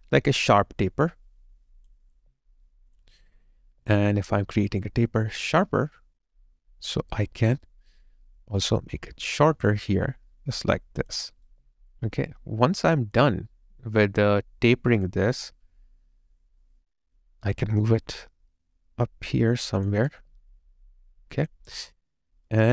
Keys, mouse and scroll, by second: 2.2 alt+click, 3.6 alt+click, 3.6 alt+right click, 4.2 alt+middle click, 4.6 alt+click, 11.5 alt+right click, 11.9 alt+click, 20.1 alt+click.